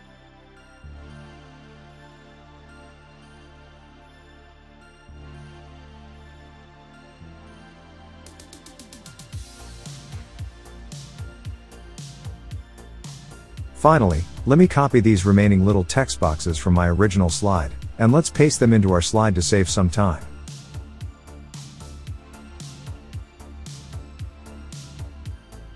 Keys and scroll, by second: 17.9 super+c, 20.4 super+v, 22.8 super+c, 24.1 super+v.